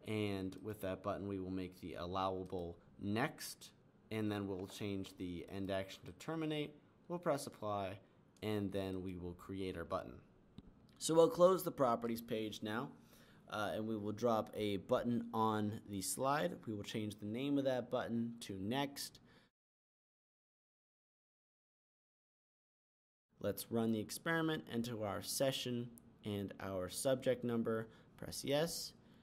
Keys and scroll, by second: 3.9-5.6 typing, 17.9-19.6 typing.